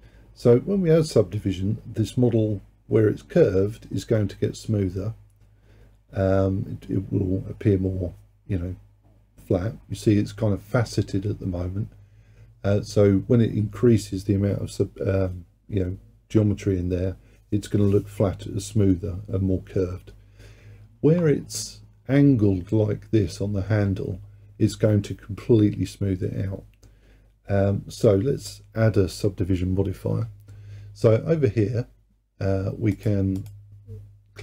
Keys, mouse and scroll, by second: 33.0 click, 33.4 click.